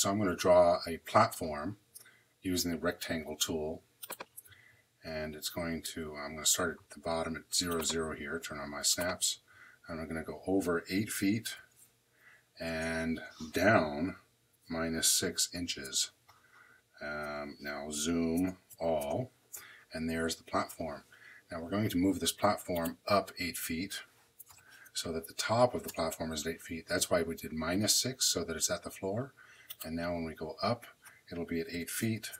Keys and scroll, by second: 11.0 8, 11.4 ', 12.4 Tab, 14.8 6, 15.6 Home, 17.8 z, 18.3 Return, 18.6 a, 18.9 Return, 24.4 m, 25.7 Return, 31.6 8, 32.0 ', 32.2 Return.